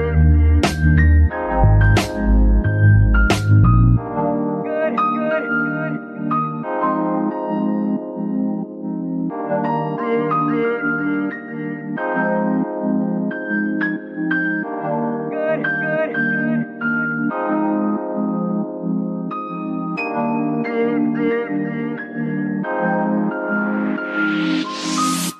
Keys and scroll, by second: 6.0 z, 9.5 Num_Lock.